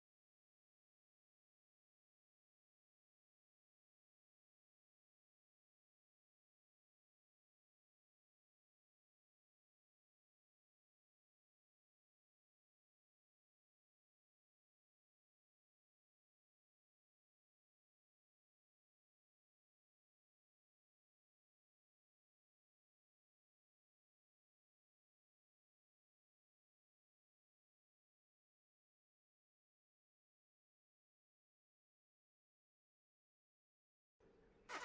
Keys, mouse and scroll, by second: 0.7 right click, 1.1 g, 2.3 click, 6.4 right click, 6.7 g, 8.1 shift+middle click, 9.5 shift+middle click, 12.3 right click, 12.7 g, 13.9-14.4 scroll down 1, 14.4 middle click, 14.9 ctrl+middle click, 16.5 middle click, 17.5 ctrl+middle click, 19.8 middle click, 20.6 ctrl+middle click, 23.5 middle click, 25.0 ctrl+s, 26.4 scroll down 1, 27.7 KP_0, 30.2-30.9 scroll up 4, 32.2 p.